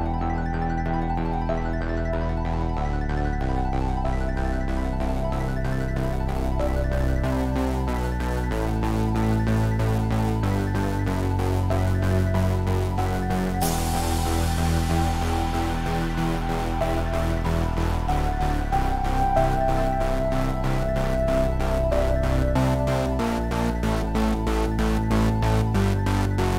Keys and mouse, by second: 8.2-9.3 middle drag, 11.2-17.5 drag, 19.6-21.0 right drag, 21.0 Tab, 23.9 KP_1.